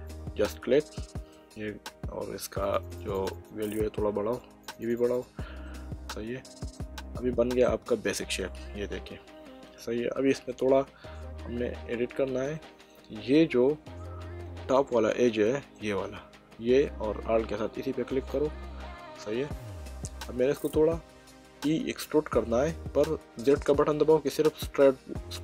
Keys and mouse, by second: 1.0 middle click, 2.6 click, 7.1 Tab, 7.6 middle click, 12.5 middle click, 14.4 middle click, 16.4 click, 18.1 alt+click, 18.9 middle click, 21.8 e.